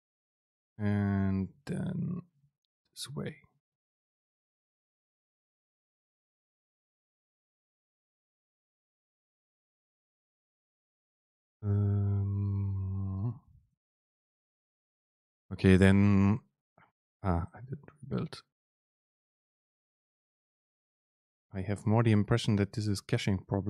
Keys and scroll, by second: 0.3 Right, 0.6 Return, 1.0 super+v, 1.5 End, 1.7 Left, 2.8 BackSpace, 4.1 ctrl+shift+super+F9, 13.3 super+space.